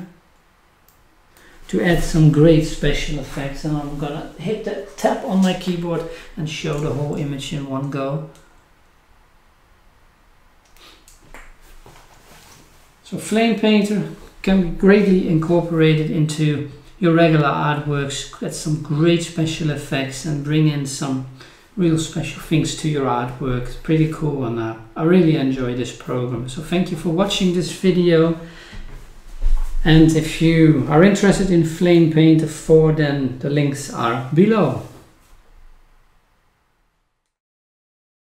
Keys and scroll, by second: 0.7-1.1 scroll down 1.